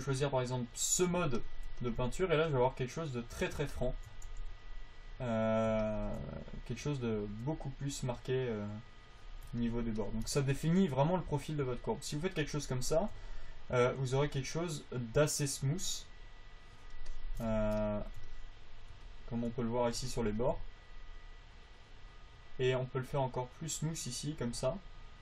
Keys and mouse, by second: 2.3 click, 4.7 f, 5.3-11.3 drag, 17.3-18.4 drag, 24.0-25.2 drag.